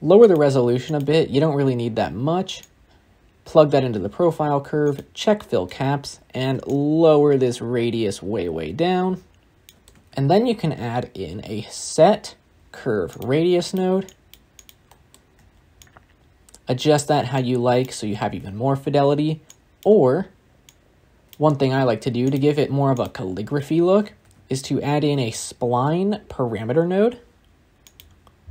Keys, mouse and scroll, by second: 0.7-3.5 drag, 4.7-9.8 drag, 15.8-27.9 shift+drag.